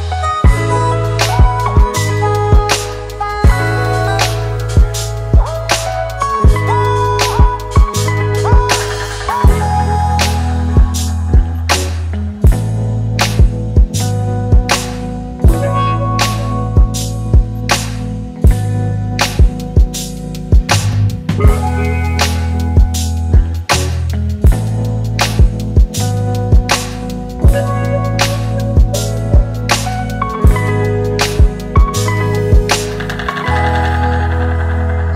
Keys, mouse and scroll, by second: 1.6-2.6 typing, 5.0 typing, 6.3-8.2 typing, 11.5-11.8 typing, 19.2 typing, 21.8 ctrl+t, 22.0 ctrl+click, 22.4 ctrl+click, 23.1 ctrl+click, 23.3 ctrl+click, 23.7 ctrl+click, 24.0 ctrl+click, 24.4 ctrl+click, 25.4 Return, 29.4-29.8 typing, 32.2-32.7 alt+scroll down 3.